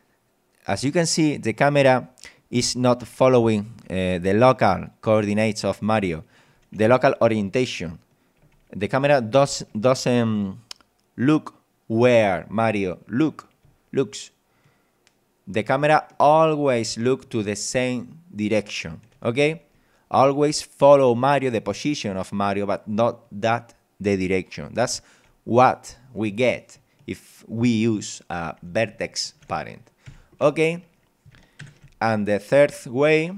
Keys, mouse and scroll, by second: 5.2 d, 7.3 d, 9.1 w, 13.7 w, 15.9 a, 21.1 d, 26.0 d, 31.6 ctrl+Up.